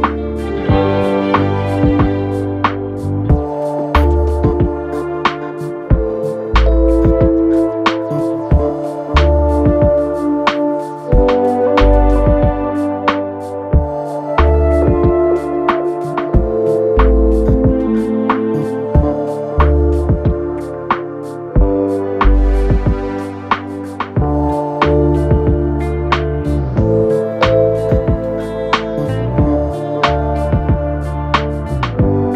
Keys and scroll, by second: 7.1 4, 7.9 3, 11.8 ctrl+d, 12.0 Escape, 15.2 ], 16.7 ], 22.6 ctrl+z, 24.6 ], 31.5 F1, 32.0 Delete.